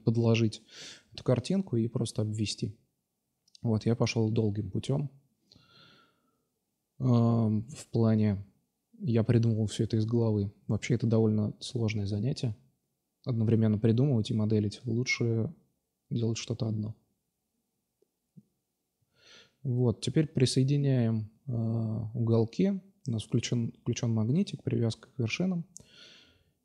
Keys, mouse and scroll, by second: 0.1-0.7 right drag, 0.5 x, 1.7 right click, 3.4 right click, 5.6-7.2 drag, 8.3 Tab, 9.8 Tab, 10.5 Tab, 11.3 a, 11.4 a, 11.7 s, 13.4-14.3 middle drag, 13.8 Tab, 15.3 drag, 15.6 right click, 16.3 g, 17.7-18.2 middle drag, 18.2 right drag, 18.7 g, 21.5 middle click, 22.1 middle click, 24.2 shift+d, 24.8 s.